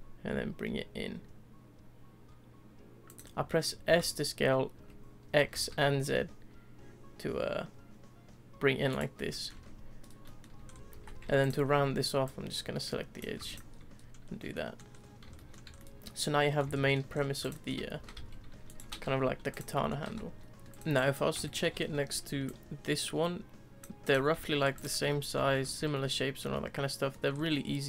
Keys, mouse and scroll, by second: 3.4 shift+middle click, 3.8 s, 9.1-9.5 middle drag, 9.5 Tab, 10.0 scroll down 1, 10.2-10.5 middle drag, 10.5 Tab, 10.6-10.9 scroll up 2, 10.9 2, 11.4 alt+click, 12.2 click, 13.4 Tab, 13.4 click, 13.7-14.4 scroll down 4, 14.4 scroll up 1, 14.5-14.9 middle drag, 14.9-15.3 scroll down 2, 15.3-15.7 shift+middle drag, 15.7 scroll up 1, 15.8-17.1 middle drag, 17.1 scroll up 1, 17.4 click, 17.7-18.0 scroll up 1, 18.0 s, 18.8 s, 19.7 middle drag, 20.0 s, 20.6 shift+middle click, 20.9 click, 21.4 shift+middle drag, 21.7-22.4 scroll down 2, 22.4 ctrl+click, 24.0 ctrl+click, 24.4-24.7 shift+middle drag, 24.7 click, 25.0 scroll up 1, 25.1-25.8 middle drag, 25.8 scroll up 1, 25.9-27.3 middle drag, 27.3 scroll up 2, 27.5-27.8 middle drag.